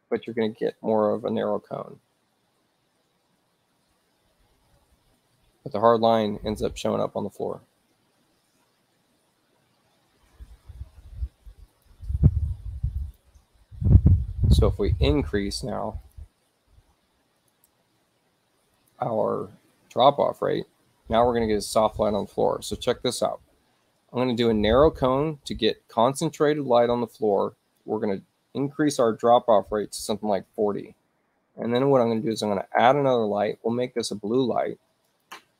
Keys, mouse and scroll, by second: 11.8 click, 13.0 click, 16.1 click, 17.4 shift+click, 18.8 click, 27.5 click, 30.3 0, 30.9 Tab, 32.2 click, 33.6 click, 35.1 click.